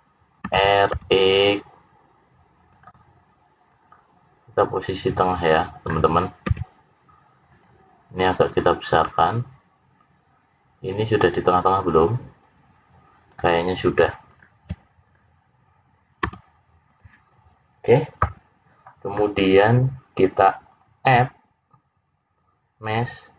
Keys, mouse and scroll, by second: 0.4 r, 3.6 click, 6.4 s, 8.6 click, 14.2 click, 15.0 click, 16.2 s, 20.6 click.